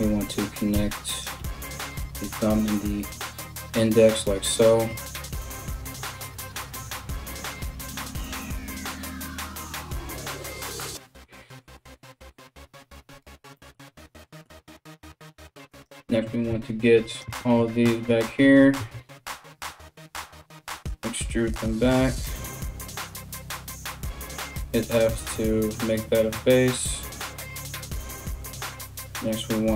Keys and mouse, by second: 0.4 f, 0.8 right click, 1.0 f, 15.3 right click, 16.7 ctrl+right click, 18.4 KP_1, 19.4 e, 23.1 right click, 23.9 f, 29.4 right click, 29.5-29.7 middle drag.